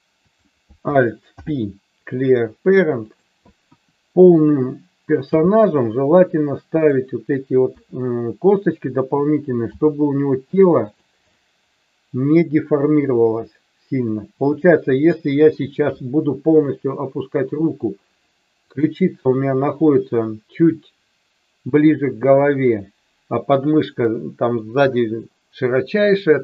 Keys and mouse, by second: 0.2 click, 1.4 alt+p, 3.6 KP_1, 5.2 g, 6.8 click, 7.6 KP_3, 9.8 g, 10.8 click, 11.4-15.0 middle drag, 15.3 KP_1, 18.6 click.